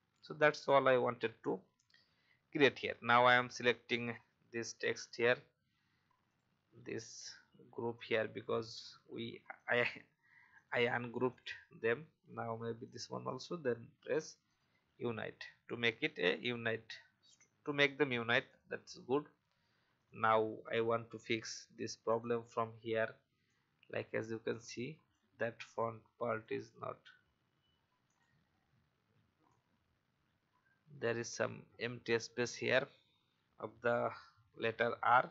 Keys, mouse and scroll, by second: 1.2-1.7 alt+scroll up 1, 2.7-3.8 alt+scroll down 1, 4.1 click, 6.2 shift+click, 7.0 shift+click, 7.9 shift+click, 9.5 shift+click, 10.5 shift+click, 11.2 shift+click, 12.8 shift+click, 14.4 click, 16.4-16.9 alt+scroll up 1, 17.9 alt+scroll up 1, 18.4 click, 20.4 alt+scroll up 1, 22.0-35.3 drag.